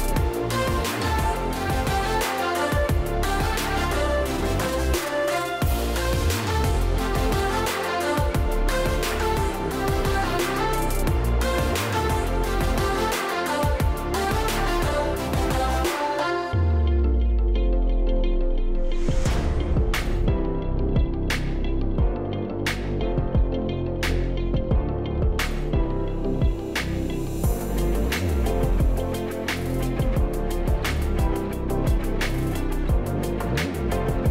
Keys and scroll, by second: 8.7 space, 13.1 ctrl+z, 14.1 v, 15.1 space, 19.1 space, 19.3 space, 31.6-32.3 space.